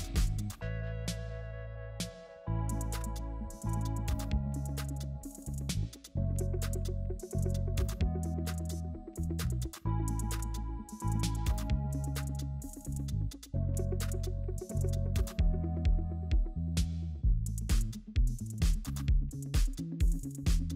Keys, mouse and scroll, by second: 4.0 space, 5.2 alt+click, 7.3 alt+click, 12.0 space, 18.6 space, 20.6 ctrl+z.